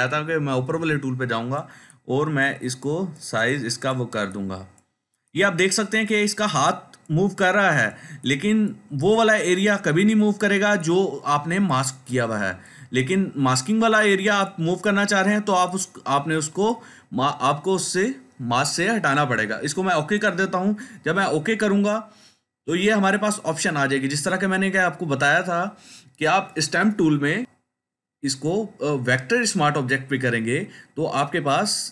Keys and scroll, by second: 0.0 ], 0.2 ], 0.5 ], 0.6 ].